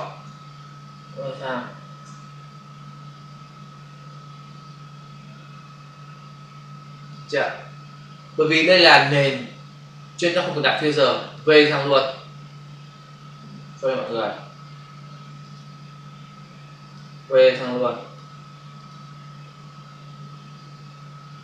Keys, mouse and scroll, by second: 0.2 space, 11.2 click, 14.0 ctrl+z, 15.3 click, 15.5 click, 16.8 click, 18.8 click.